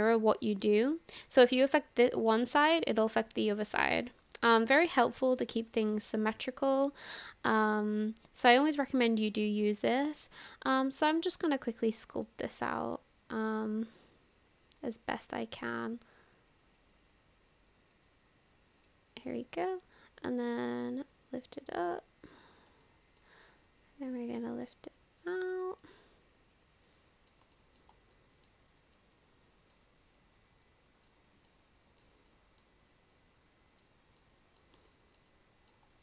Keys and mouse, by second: 4.2 ctrl+z, 4.5-5.8 middle drag, 5.9-7.6 middle drag, 7.7 click, 7.8-9.4 middle drag, 11.0-12.3 drag, 13.5-14.8 drag, 15.5-16.8 drag, 18.1 click, 19.8 middle click, 21.0-22.6 drag, 22.9 middle click, 24.3-25.6 drag, 25.8-27.3 middle drag, 27.6 shift+middle click, 28.2 middle click, 29.1 click, 30.3 click, 31.5 middle click, 32.3 middle click, 33.2 click, 34.2 middle click, 34.9 shift+middle click, 35.3 middle click.